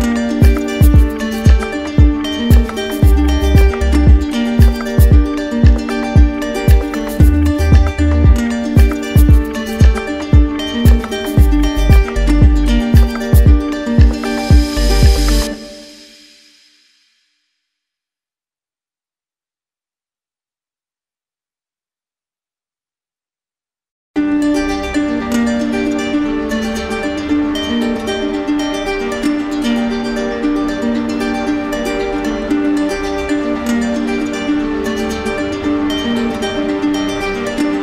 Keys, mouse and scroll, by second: 3.8 click, 4.2 ctrl+z, 5.3 click, 8.3 click, 8.6 ctrl+z, 10.3 click, 11.9 click, 12.4 alt+click, 15.9 click, 16.1 click, 17.3 right click, 19.3 click, 20.3 click, 21.3-22.3 right drag, 22.8-23.9 drag, 25.5 click, 25.7 ctrl+z, 26.3 right click, 27.6 click, 30.8 click, 30.9 ctrl+click, 31.1 ctrl+z, 34.8 click, 35.1 ctrl+z.